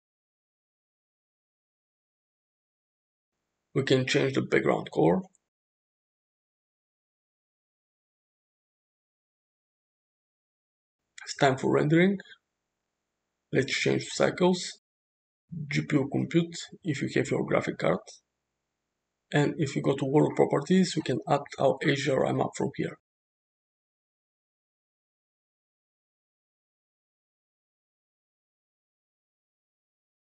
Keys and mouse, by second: 3.0 click, 4.9 click, 11.9 click, 14.2-15.3 drag, 16.2-17.7 drag, 17.9 click, 20.1 click, 21.7-23.3 drag, 24.5 click.